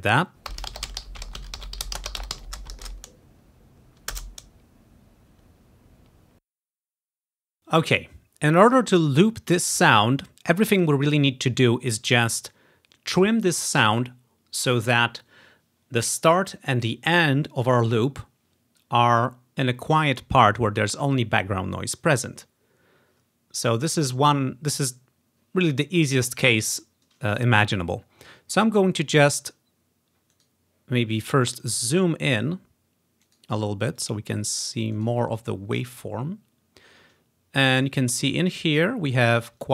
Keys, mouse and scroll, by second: 0.4 space, 6.5 space, 30.4 right click, 32.5 click, 33.3 right click, 34.1 right click, 35.0 right click, 38.0 click, 39.3 click.